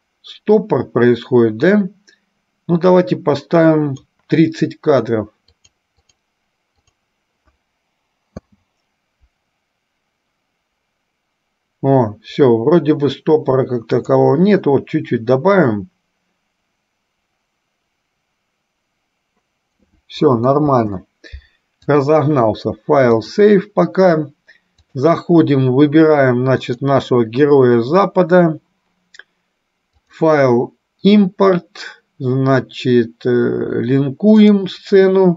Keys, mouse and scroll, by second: 5.7 click, 6.2 click, 7.1 click, 8.5 space, 14.3 click, 20.7 space, 22.1-23.5 drag, 25.0-27.6 drag, 30.2-35.1 drag.